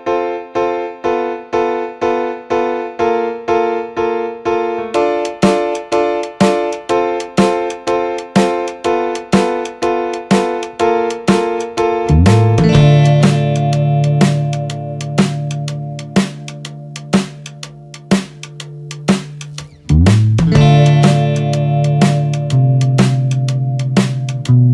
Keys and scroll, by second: 2.2 ctrl+=, 4.1 ctrl+z, 10.2 ctrl+0, 19.1 ctrl+=.